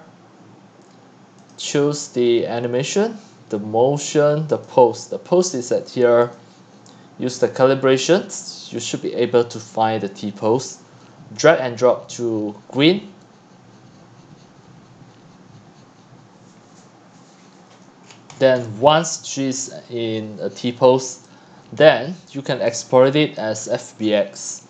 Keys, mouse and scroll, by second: 3.5-4.5 scroll down 4, 4.5 scroll, 4.7 click, 7.6 click, 8.9-16.5 drag, 18.0-18.7 scroll down 21, 18.7 x, 19.3-21.8 drag, 21.8 scroll, 21.8 scroll, 21.9 scroll, 22.1 scroll, 22.2 scroll, 22.4 scroll, 22.5 scroll, 23.4 click, 23.7-24.6 scroll down 12.